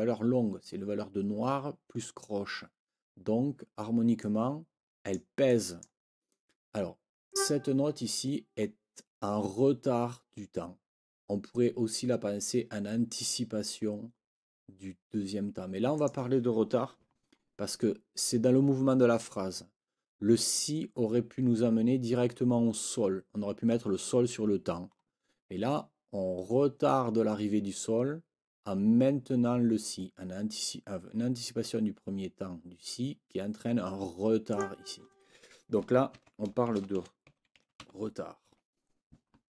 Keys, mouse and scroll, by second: 4.2-5.3 drag, 5.5 click, 7.3 click, 15.9 click, 34.5 click, 36.1 ctrl+t, 36.4-38.3 typing, 38.5 Escape.